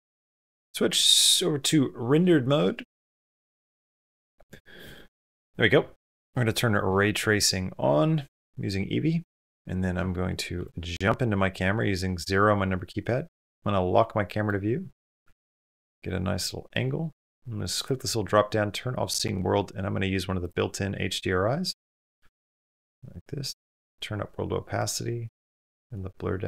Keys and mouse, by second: 0.0 middle click, 10.4 KP_0, 13.2 click, 13.8-14.3 middle drag, 14.8 shift+middle click, 15.1 ctrl+middle click, 15.4 shift+middle drag, 15.9 middle click, 16.3 shift+middle click, 16.7 middle click, 17.6-26.4 drag.